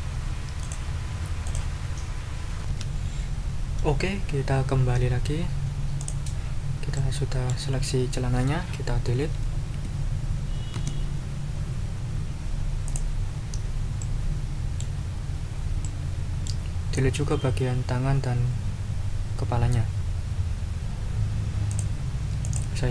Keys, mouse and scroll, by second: 0.6-1.4 scroll up 1, 1.4 scroll up 1, 2.6 ctrl+r, 6.0 click, 6.9 click, 10.7 Delete, 12.8 click, 14.0-15.0 drag, 15.8 click, 21.7 scroll up 2, 22.4-22.7 scroll up 2.